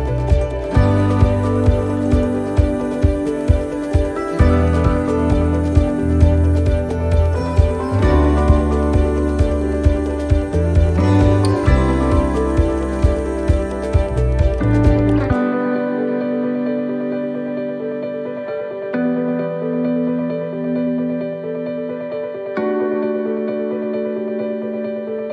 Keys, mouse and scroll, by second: 0.1-0.4 scroll up 2, 0.5 shift+middle click, 0.9-1.7 scroll up 1, 1.7 right click, 3.1 click, 3.8 right click, 4.2 shift+right click, 6.1 right click, 6.9-9.8 shift+right click, 9.8 middle click, 11.1 e, 13.3 middle click, 13.6-14.0 scroll down 2, 14.2 shift+middle click, 14.5 scroll up 3, 15.7 ctrl+r, 19.0 ctrl+r, 21.9 middle click, 22.6 middle click, 23.8 ctrl+r.